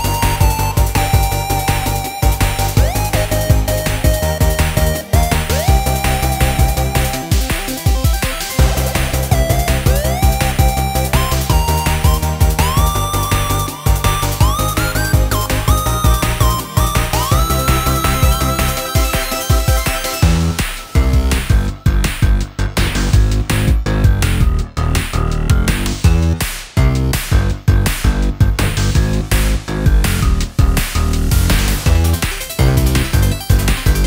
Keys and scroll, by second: 17.2 super+c, 17.6 super+v, 24.6 super+ㅇ, 32.0 super+ㅊ, 32.2 super+ㅍ.